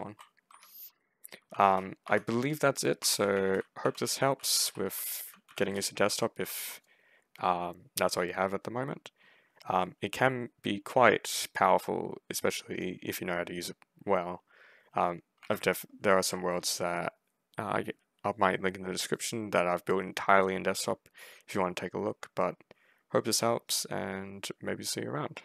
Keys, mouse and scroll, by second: 0.4 F5, 1.1-4.4 typing, 2.9 ctrl+right click, 4.5 ctrl+c, 4.7 ctrl+a, 5.1 ctrl+w, 5.3 ctrl+w, 5.5 ctrl+space, 5.8 ctrl+s, 6.3 ctrl+s.